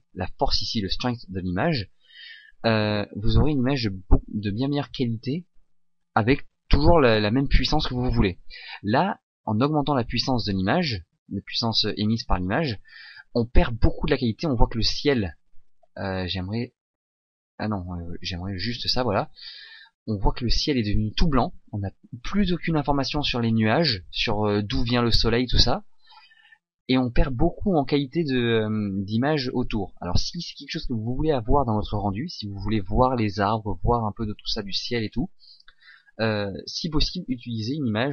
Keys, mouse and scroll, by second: 11.1 shift+click, 12.4 middle click, 14.1 middle click, 14.6 middle click, 15.1 middle click, 16.0 middle click, 16.2 middle click, 18.0 click, 19.2 middle click, 22.6 middle click, 23.1 middle click, 27.8 middle click.